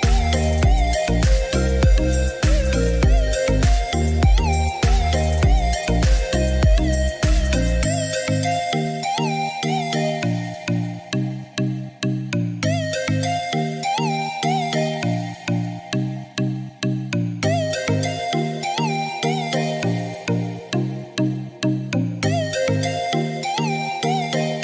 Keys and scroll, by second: 1.1 0, 1.5 Return.